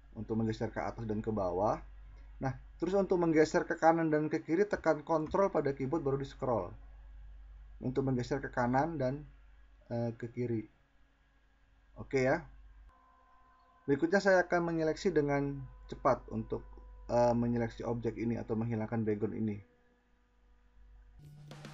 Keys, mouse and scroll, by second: 1.0 middle click, 1.0 scroll, 1.2 middle click, 1.4 middle click, 1.8 middle click, 2.2 middle click, 4.6-6.0 ctrl+scroll.